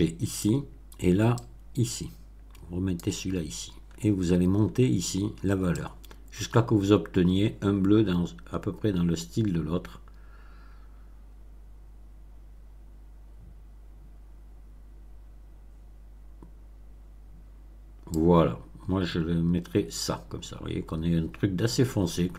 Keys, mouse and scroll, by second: 1.3-3.1 drag, 3.7-4.8 scroll up 3, 4.8 middle click, 5.8-18.3 drag.